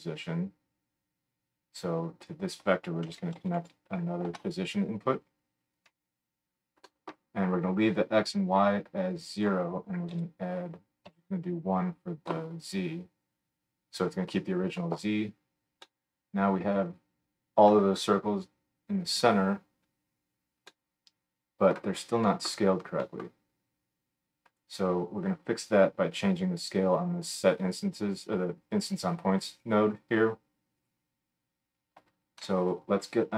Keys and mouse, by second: 1.8-5.9 drag, 5.9-9.3 middle drag, 9.3-24.6 drag, 24.6-28.3 middle drag, 30.8 click, 32.4 F3.